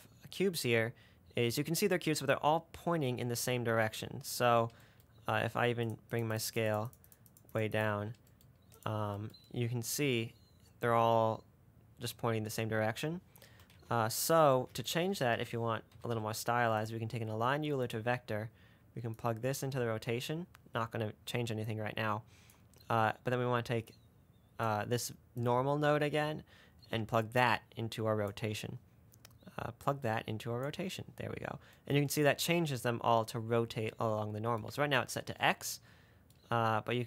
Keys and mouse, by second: 0.8-1.2 middle drag, 6.4 middle click, 6.6 middle click, 7.1 middle click, 7.4 middle click, 7.7 middle click, 9.0 click, 14.0 shift+a, 19.5-20.4 drag, 31.1-34.0 middle drag.